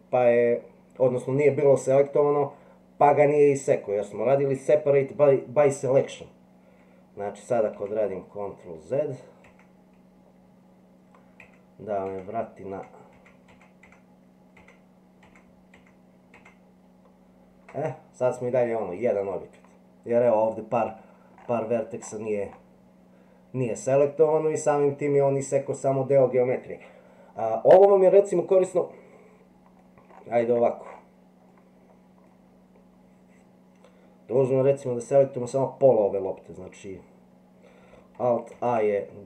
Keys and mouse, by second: 7.8 ctrl+z, 9.5 ctrl+z, 12.7 ctrl+z, 13.5 ctrl+z, 14.6 ctrl+z, 15.3 ctrl+z, 18.6-19.7 middle drag, 26.9-29.8 middle drag, 31.5 middle click, 38.5 alt+a.